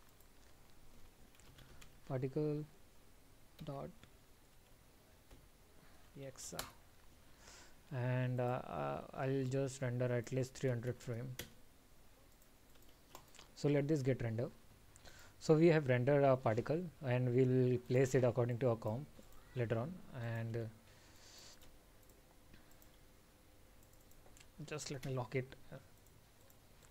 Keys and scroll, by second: 13.1 ctrl+s.